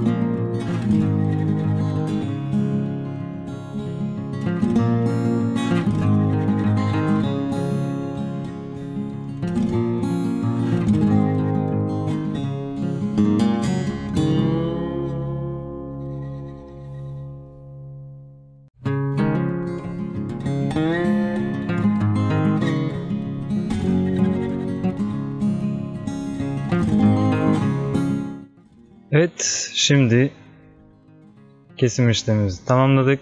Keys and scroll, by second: 8.9 ctrl+alt+z, 27.8 ctrl+d.